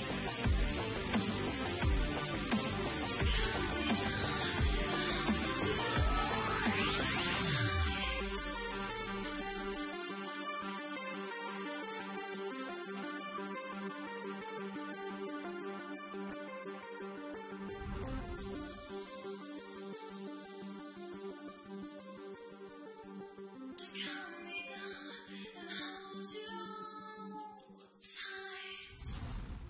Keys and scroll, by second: 1.7-2.1 typing, 5.4 v, 8.9 ctrl+t, 21.5 Return, 21.9 Down, 23.4 space, 24.0 e, 29.0 Down, 29.1 +, 29.2 Down, 29.3 +.